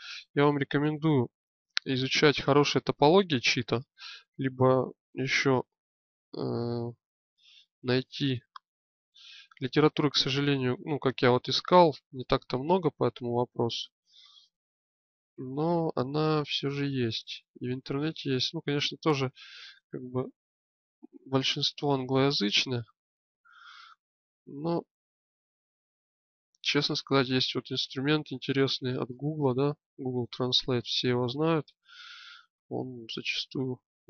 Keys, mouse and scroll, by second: 0.5 click, 5.9-7.1 drag, 7.6-9.5 middle drag, 12.2 middle click, 18.5 middle click, 20.5-22.4 drag, 23.3-24.8 drag, 24.9-26.7 drag, 26.7 right click, 27.5-28.7 drag, 30.3 click, 31.8 click, 32.7 right click, 33.4 click.